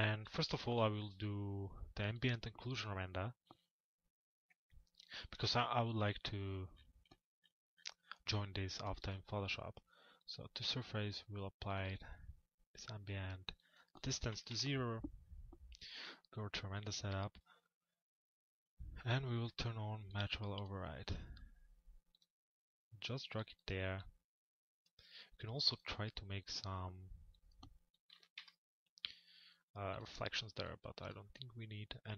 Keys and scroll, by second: 0.3 m, 14.1 Return, 27.9 Return, 31.4 Return.